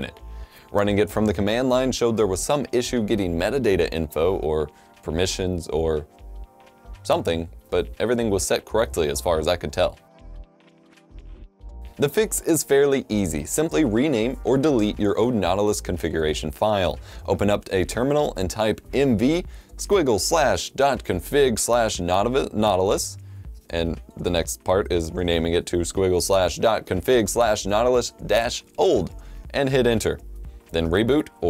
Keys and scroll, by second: 4.4-6.1 typing, 19.2-28.6 typing, 30.4 F12, 30.4 typing.